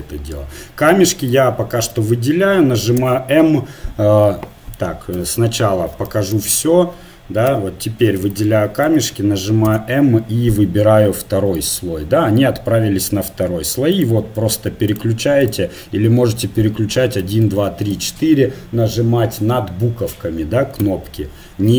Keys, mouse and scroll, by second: 1.3-3.1 drag, 3.0 m, 5.1 KP_Divide, 7.5 a, 8.3-9.7 drag, 9.7 m, 13.9-17.4 drag, 17.2 1, 17.4 2, 17.7 3, 17.9 4, 20.8 1.